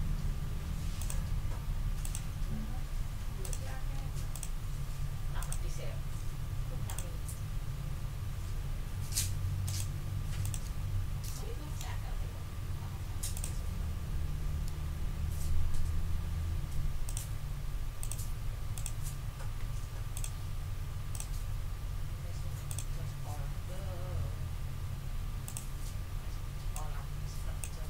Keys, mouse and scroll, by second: 1.0 click, 2.0 click, 3.4 click, 4.3 shift+click, 5.4 shift+click, 6.8 click, 10.8 ctrl+scroll down 2, 12.1-12.9 ctrl+scroll up 3, 13.3 ctrl+middle click, 14.7 ctrl+scroll down 1, 15.6-15.9 ctrl+scroll up 1, 17.0 ctrl+click, 17.5 ctrl+scroll up 3, 18.0 ctrl+click, 18.7 click, 19.6 d, 20.1 click, 21.1 click, 22.7 click, 25.4 click, 26.7-27.8 drag.